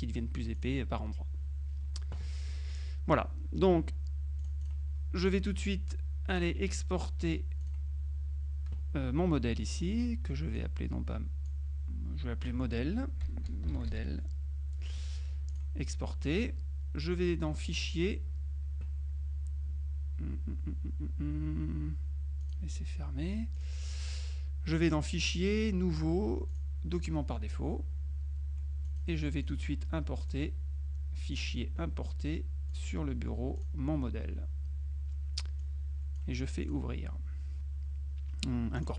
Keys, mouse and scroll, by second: 0.7 click, 2.8 click, 4.5 click, 5.8-6.9 drag, 7.7 click, 10.6-12.1 drag, 13.1-14.3 typing, 15.6 click, 17.7 click, 22.5 click, 23.7 click, 24.9 click, 26.6 click, 29.1 click, 30.3 click, 31.4-33.4 drag, 33.7 click, 35.8-36.8 drag, 38.8 click.